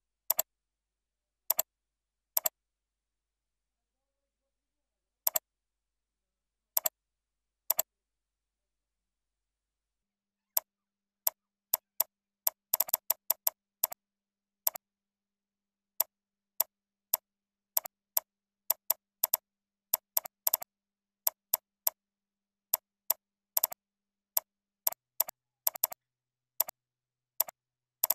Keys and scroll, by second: 7.4 ctrl+c, 8.4 ctrl+v, 12.1 ctrl+a, 19.1 ctrl+c, 19.4 ctrl+a, 19.5 ctrl+v, 20.3 ctrl+c, 20.6 ctrl+a, 20.9 ctrl+v, 21.8 ctrl+c, 22.1 ctrl+a, 22.3 ctrl+v, 23.4 ctrl+c, 23.8 ctrl+a, 24.0 ctrl+v, 25.6 ctrl+c, 26.0 ctrl+a, 26.2 ctrl+v, 27.7 ctrl+e.